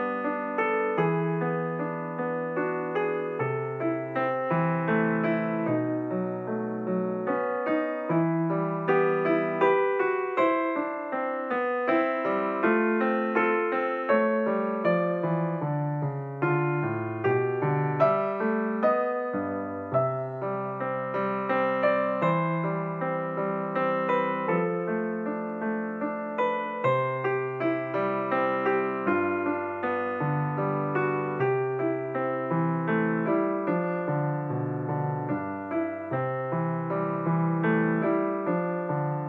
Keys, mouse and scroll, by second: 2.2 s, 7.2 s, 14.2-15.5 middle drag, 16.8 s, 21.5 KP_7, 23.3 g, 28.4-29.0 scroll up 3, 31.0 shift+click, 33.4 ctrl+KP_Subtract, 36.3 click, 38.2 click.